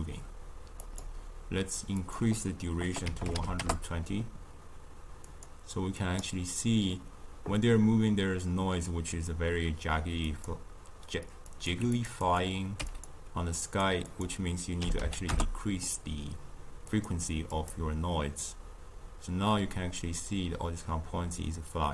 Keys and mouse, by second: 0.9-5.0 drag, 5.3-9.1 drag, 10.4-12.0 drag, 12.2 click, 13.6 click, 14.1-20.6 drag.